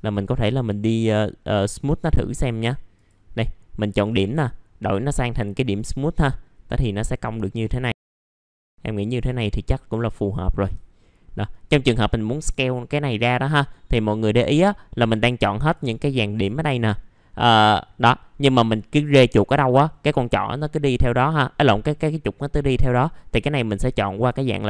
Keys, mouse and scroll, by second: 2.9 click, 3.3-4.0 scroll up 1, 4.0 right click, 5.7 click, 7.6 middle click, 8.1-8.6 scroll down 2, 8.2 click, 8.4 middle click, 9.2 click, 10.1 middle click, 10.4 scroll up 1, 11.0 middle click, 15.7 click, 21.2-24.6 drag.